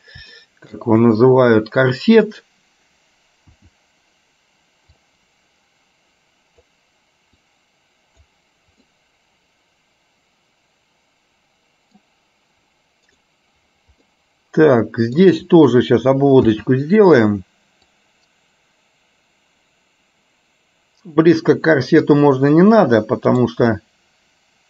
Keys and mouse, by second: 0.5 shift+middle click, 14.1-15.2 middle drag, 23.9 middle click.